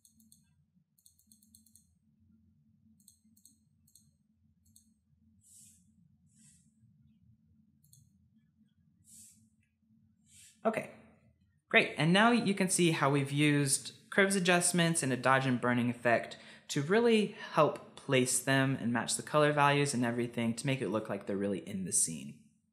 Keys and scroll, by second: 5.9 ctrl+z, 6.9 [, 7.1 [, 9.6 ctrl+z.